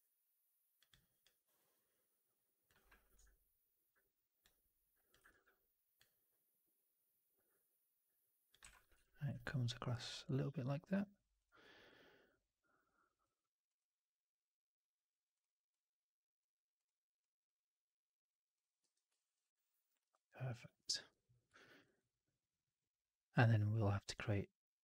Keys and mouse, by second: 4.3 click, 5.2 ctrl+e, 8.0 click, 8.5 w, 8.8 4, 9.3-9.7 alt+middle drag, 10.8 1, 11.3 click, 18.7 4, 19.0 alt+middle drag, 19.3 right drag, 19.5 right click, 19.7 middle drag, 21.5 middle click, 21.7 alt+right drag.